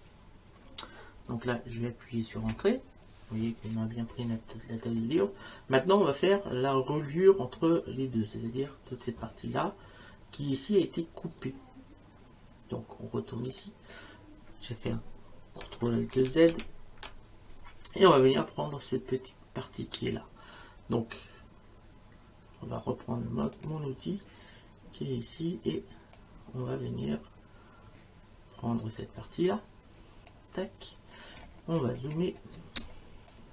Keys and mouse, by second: 2.4 Return, 2.4 KP_Enter, 13.5 click, 16.1 ctrl+alt+z, 23.5 click, 26.2 click, 32.8 space, 33.3 click.